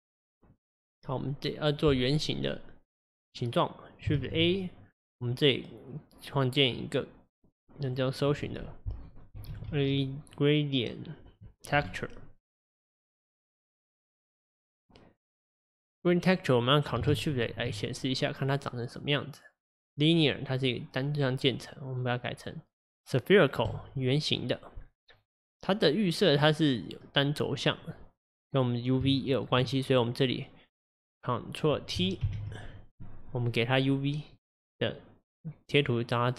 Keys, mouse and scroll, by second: 17.3 ctrl+shift+click, 18.3-21.8 scroll down 4, 21.8-23.7 scroll down 1, 23.7-24.8 drag, 24.8-27.1 scroll down 3, 27.1-30.0 scroll down 1, 30.0 click, 32.3 ctrl+t, 33.8-36.1 drag.